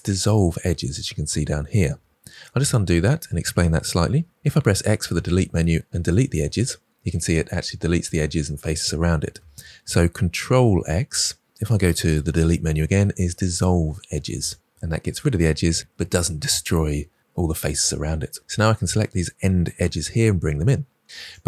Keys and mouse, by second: 2.5 ctrl+z, 4.2 x, 9.4 ctrl+z.